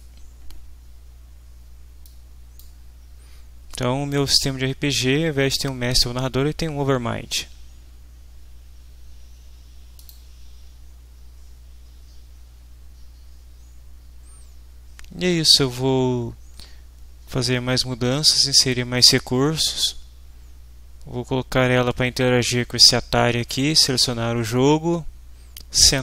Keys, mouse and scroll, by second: 2.0 click, 10.0 click.